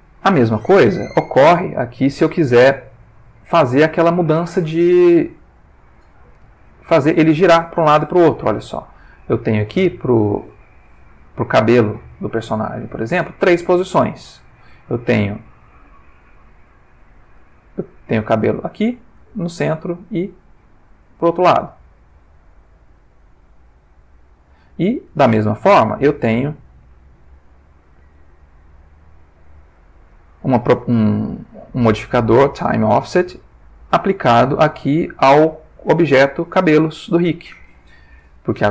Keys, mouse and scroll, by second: 0.6-1.4 ctrl+middle drag, 1.4-2.1 ctrl+shift+middle drag, 5.1 click, 7.3-11.2 drag, 12.2 click, 14.1 Tab, 16.6 Tab, 17.3 Tab, 17.8-24.8 drag, 25.1 Tab, 26.1 Tab, 27.0 Tab, 29.2 click.